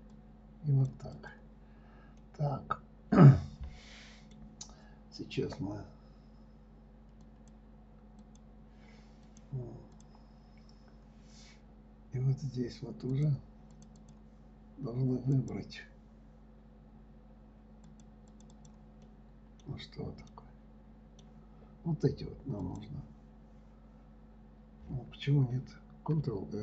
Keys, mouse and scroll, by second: 2.5-5.6 middle drag, 7.6 click, 8.6 click, 9.6 click, 10.3 click, 12.0-13.5 scroll up 2, 13.5 click, 14.1 click, 14.4 click, 15.7 click, 18.2 click, 18.7 click, 18.9 click, 19.4 middle click, 20.1-20.7 scroll down 1, 20.7-23.0 middle drag, 23.0 click.